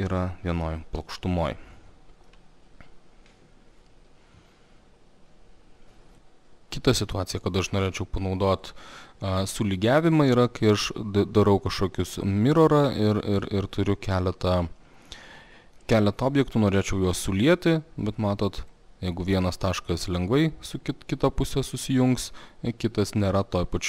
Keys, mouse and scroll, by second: 2.3 alt+middle click, 5.8 click, 8.9 click, 13.1 click, 15.3 click, 16.8 middle click, 18.7 click.